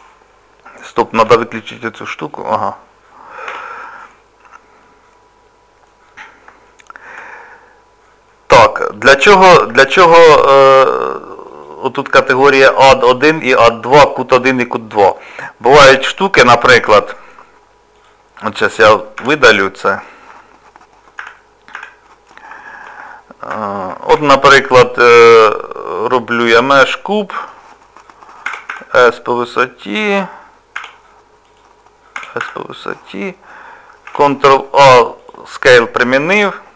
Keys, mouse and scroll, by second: 1.2 t, 2.2 click, 3.5 t, 4.8 middle click, 6.7 shift+middle click, 7.4 scroll up 1, 7.4 scroll down 1, 8.3 middle click, 9.2-9.7 scroll down 1, 9.8 shift+middle click, 10.4 scroll down 1, 11.5 click, 16.2 middle click, 18.0 click, 19.4 Delete, 21.2 z, 22.3 middle click, 23.1 shift+middle click, 24.1 shift+a, 34.1 ctrl+a, 36.1 middle click.